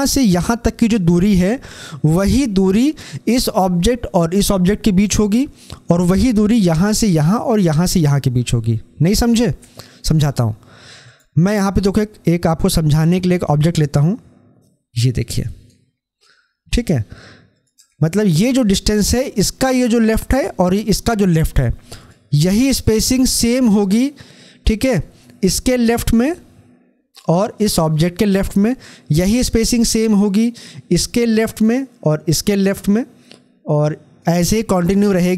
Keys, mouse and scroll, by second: 10.9 click, 13.4-15.9 drag, 15.9 scroll up 1, 21.8-35.3 drag.